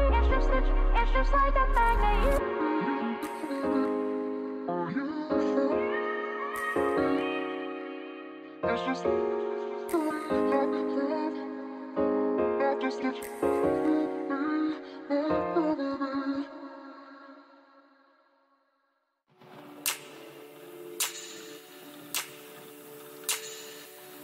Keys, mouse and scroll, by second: 1.2 ctrl+r, 5.3-7.7 middle drag, 8.5-11.5 middle drag, 11.5-13.6 drag, 12.1 a, 12.5 a, 12.9-14.2 right drag, 13.5 middle click, 14.2 click, 14.6 middle click, 17.1 Delete, 18.6-20.3 middle drag.